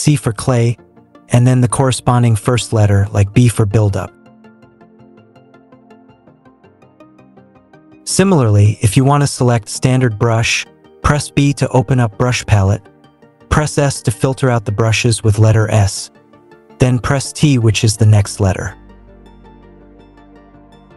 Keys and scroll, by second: 3.0 b, 11.0 b, 13.4 s, 16.8 t.